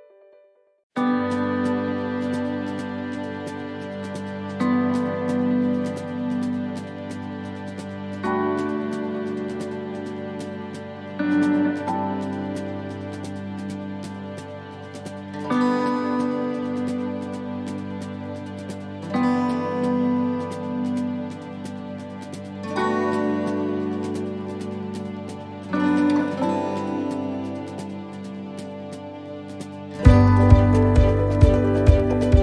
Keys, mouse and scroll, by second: 0.4 click, 8.7 click, 8.7 middle click, 9.7 click, 11.1 s, 16.2 right click, 16.2 l, 19.8-28.7 click, 19.8 shift+d, 28.7 shift+middle click, 29.9-30.3 scroll down 3, 30.3 shift+middle click, 30.8-31.3 scroll up 11, 32.2 middle click.